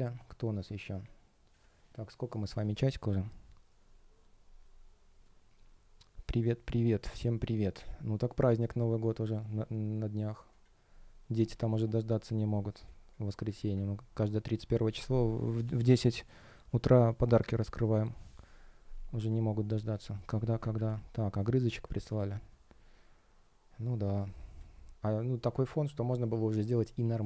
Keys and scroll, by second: 12.8 space, 19.6 shift+0, 19.9 space, 20.6 super+\, 21.1 space, 24.5 space, 26.6 space.